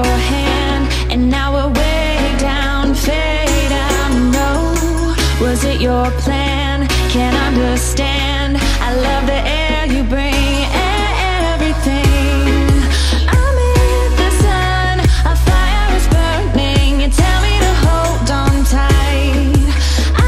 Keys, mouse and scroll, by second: 0.9 click, 16.8 click, 17.4 click, 20.0-20.2 drag.